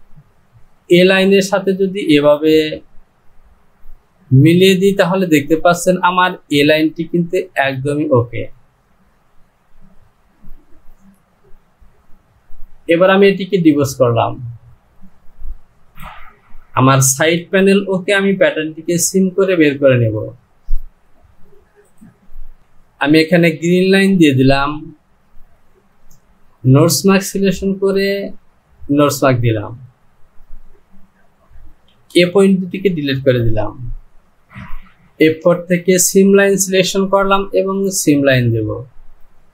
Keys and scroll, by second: 17.1 Home, 31.9 Delete.